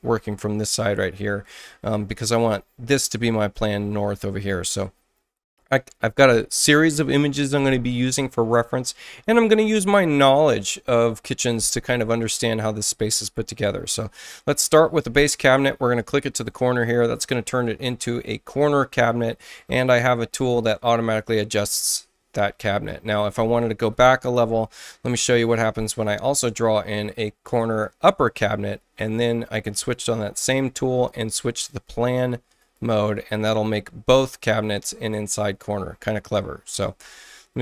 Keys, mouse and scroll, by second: 16.3 click, 20.3 click, 21.2 click, 23.9 ctrl+z, 27.5 ctrl+click, 29.7 ctrl+click, 31.5 ctrl+click, 32.5 ctrl+click, 33.8 ctrl+space, 33.9 ctrl+space.